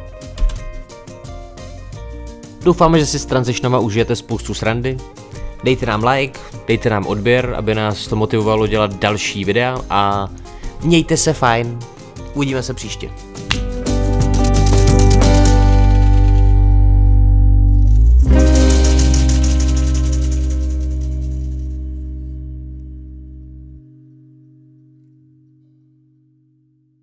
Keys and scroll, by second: 0.4 space.